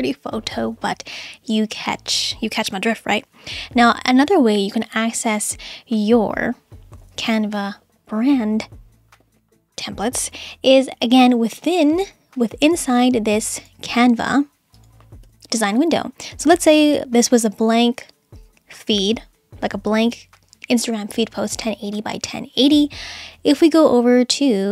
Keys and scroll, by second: 15.3 BackSpace.